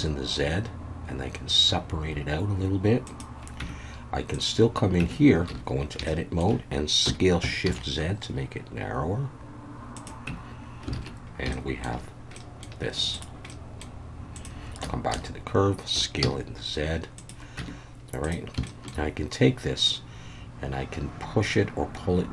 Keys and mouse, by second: 3.0 click, 3.6 Tab, 4.3 click, 5.0 Tab, 5.5 a, 6.1 shift+middle click, 7.0 s, 7.6 shift+z, 10.0 click, 10.3 Tab, 10.9 alt+a, 11.5-11.8 shift+middle drag, 12.4 middle click, 13.1 click, 13.5 middle click, 14.3 click, 14.8 Tab, 15.1 a, 15.9 s, 16.2 z, 17.2 click, 17.6 Tab, 18.3 click, 18.7 shift+middle drag, 19.9-22.3 drag.